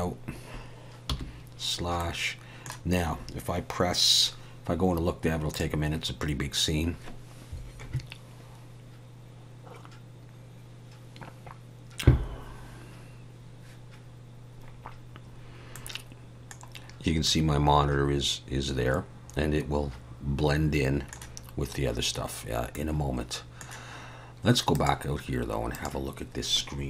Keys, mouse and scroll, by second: 1.1 /, 2.0 middle click, 16.2 middle click, 17.7 middle click, 23.1 middle click, 25.0 click, 25.7 click.